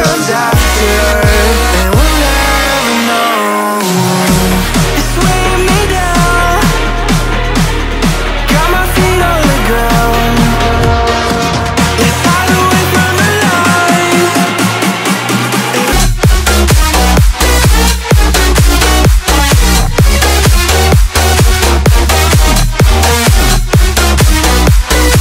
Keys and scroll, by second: 1.4 Return, 9.7 3, 10.3 Return, 13.4 4, 13.9 Return, 16.3 6, 17.5 Return.